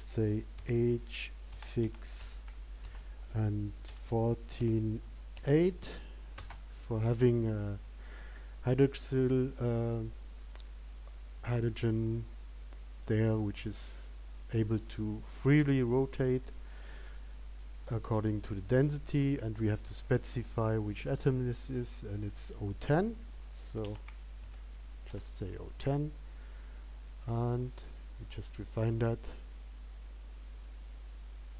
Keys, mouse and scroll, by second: 30.2 click.